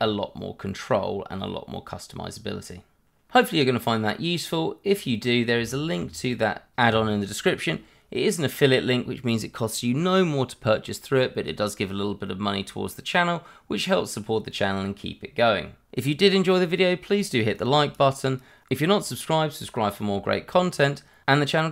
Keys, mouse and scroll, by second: 3.2-3.6 scroll down 1, 3.6 middle click, 18.2 middle click, 20.3 scroll down 1, 20.6 shift+middle click, 21.3 middle click.